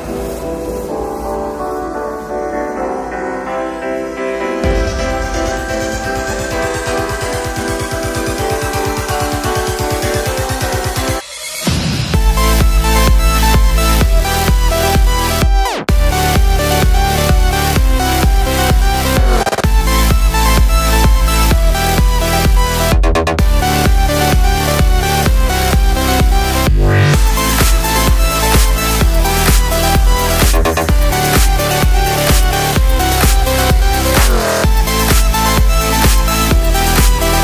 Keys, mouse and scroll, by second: 6.7-8.1 drag, 12.5-15.1 drag, 16.5-19.9 drag, 19.9 right click, 21.4 click, 22.8 click, 28.9 Right, 30.7 click, 32.7 click, 34.8 click, 36.5 right click, 36.8 click.